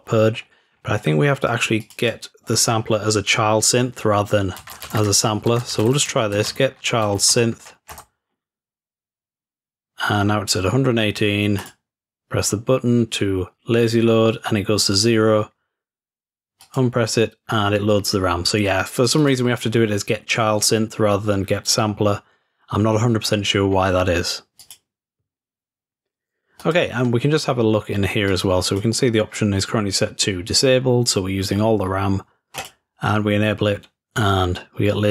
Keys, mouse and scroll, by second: 0.4-1.8 scroll up 2, 1.8 click, 1.8 scroll up 1, 2.0-3.0 drag, 11.6 click, 16.6 click, 19.1 click, 19.2 click, 22.9-24.5 scroll down 3, 24.6 click, 26.6 click, 27.0 click, 28.3 click, 29.4 drag, 32.6-33.6 drag.